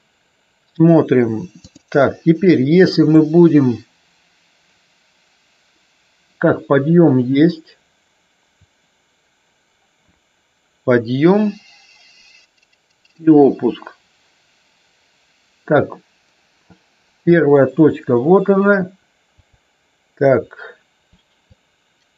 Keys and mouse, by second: 1.6 click, 3.1-17.2 drag, 19.2 click.